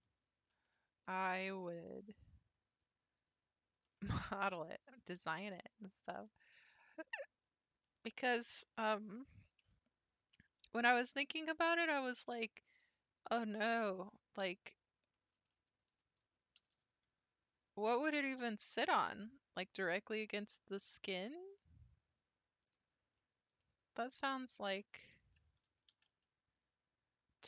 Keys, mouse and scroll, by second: 0.0 3, 0.3 click, 1.1 ctrl+click, 1.9 click, 2.7 click, 3.2 click, 3.7 click, 4.2 middle click, 5.3 middle click, 8.8 1, 9.1 middle click, 10.1 alt+click, 10.9 g, 13.6 middle click, 14.5 click, 15.8 alt+click, 16.6 g, 20.0-21.2 middle drag, 21.2-21.6 scroll down 9, 21.6-22.7 middle drag, 22.7-23.1 scroll up 4, 23.1 p, 23.2-24.7 middle drag, 24.7 p, 25.1 click, 25.9 g.